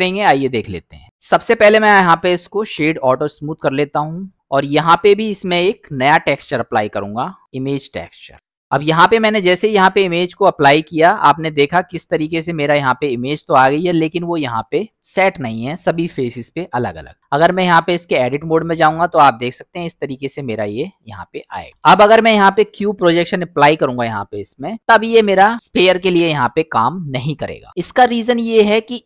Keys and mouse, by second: 1.9-3.0 right drag, 3.9 middle click, 6.0-7.5 drag, 9.0-10.1 middle drag, 10.9-11.4 middle drag, 11.8-14.1 middle drag, 14.6 middle click, 17.3-18.1 drag, 19.7-20.7 middle drag, 21.7 u, 25.5-28.5 middle drag.